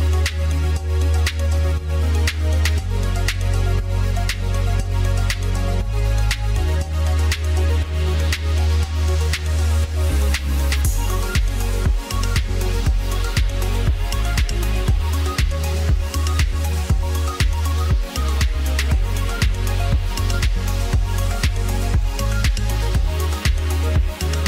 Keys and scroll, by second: 4.2 ctrl+z.